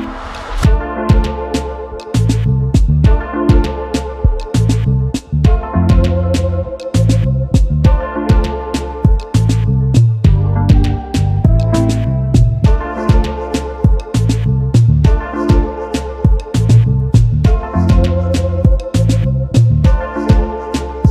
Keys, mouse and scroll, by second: 1.4 alt+scroll up 1, 3.5 right click, 7.1 double click, 9.2 alt+scroll down 1, 10.3 right click, 11.8 alt+scroll up 1, 12.3 shift+click, 14.8 double click, 16.2 alt+scroll up 1, 17.3 right click.